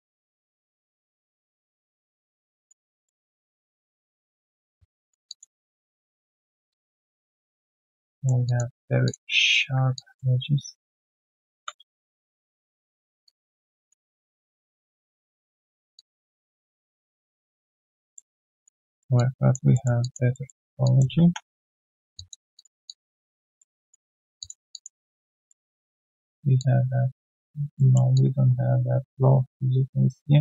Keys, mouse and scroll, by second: 0.7 alt+middle click, 1.0 alt+click, 2.9 alt+middle click, 3.7 right click, 4.7 right click, 5.2 alt+click, 5.6 alt+middle click, 5.9 alt+right click, 6.1 alt+click, 8.1 alt+middle click, 8.4 alt+click, 8.7 alt+right click, 9.9 alt+click, 15.9 alt+click, 16.3 alt+right click, 16.5 alt+click, 16.8 alt+middle click, 17.0 alt+right click, 17.2 alt+click, 18.1 alt+middle click, 18.5 alt+click, 18.8 alt+middle click, 19.1 alt+click, 19.7 alt+middle click, 20.0 alt+click, 20.3 alt+middle click, 20.6 alt+right click, 20.8 alt+click, 21.2 3, 21.6-22.1 scroll down 1, 22.1 3, 22.1 alt+click, 22.5 alt+click, 23.4 alt+middle click, 23.7 alt+click, 24.1 alt+middle click, 24.7 alt+click, 25.1 alt+middle click, 25.7 alt+click, 27.7 alt+middle click, 28.1 alt+click.